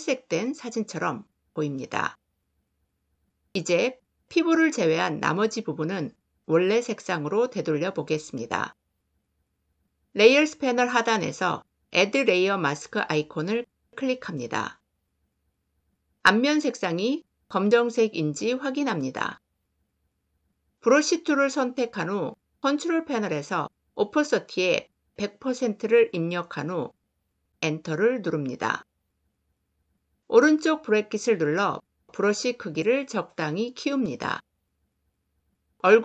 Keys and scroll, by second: 20.9 b, 27.5 Return, 30.3 ].